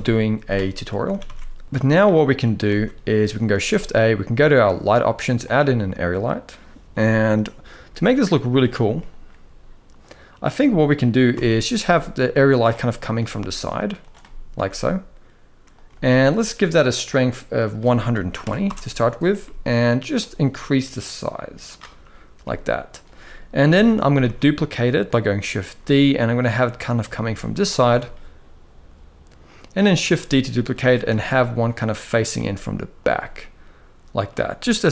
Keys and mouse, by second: 0.9 ctrl+s, 1.0 ctrl+s, 1.6 ctrl+b, 2.4 ctrl+s, 3.2 shift+a, 7.6 KP_1, 10.3 middle drag, 11.0 KP_7, 11.6 g, 12.4 middle click, 12.9 r, 13.9-14.2 middle drag, 14.3 r, 15.5 g, 16.6 click, 17.3-18.3 drag, 19.1-19.8 middle drag, 20.7 click, 22.1 g, 23.3 KP_7, 23.9 shift+d, 25.2 r, 26.8 g, 29.7 shift+d, 30.8 r, 32.0 g, 33.1-34.0 middle drag, 34.3 middle click, 34.6 g.